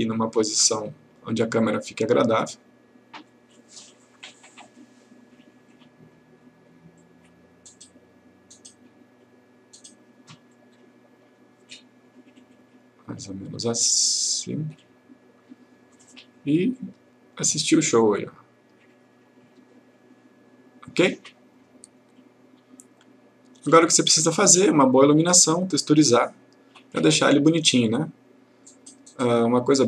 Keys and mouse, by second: 25.1 click, 28.8 click.